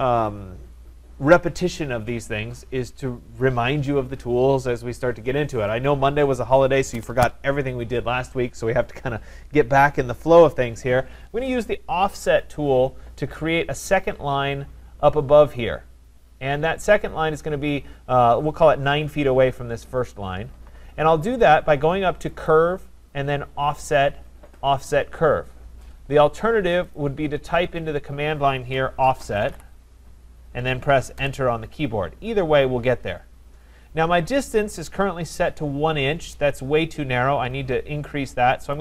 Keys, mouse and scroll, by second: 22.5 click, 27.0 click, 28.7-30.0 typing, 31.2 Return, 35.5 Return.